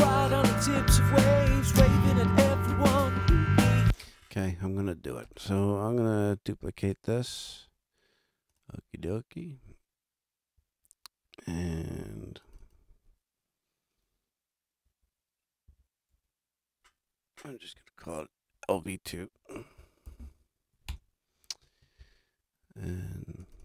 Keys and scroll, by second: 3.6 space, 15.7 Right, 16.1 BackSpace, 17.7 BackSpace, 19.8 shift+l, 20.0 shift+v, 20.7 shift+2, 20.9 Return.